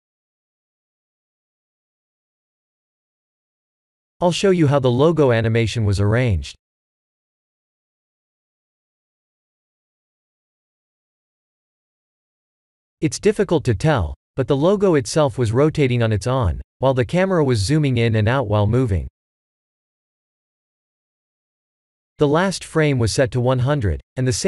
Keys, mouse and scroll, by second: 0.9 click, 3.3 click, 4.2 click, 6.1 click, 6.7-7.4 scroll up 6, 7.1 middle click, 10.5 click, 11.2 middle click, 14.5 click, 16.7 n, 18.0 click, 20.1 middle click, 21.4 KP_0.